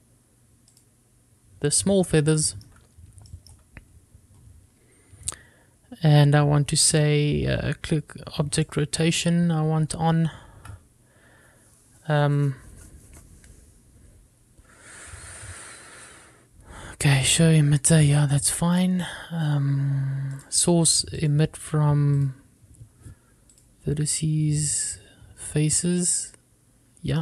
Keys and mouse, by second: 3.8-4.1 shift+middle drag, 4.5 shift+middle drag, 9.8 click, 21.6 click, 22.5 click, 24.7-25.8 drag.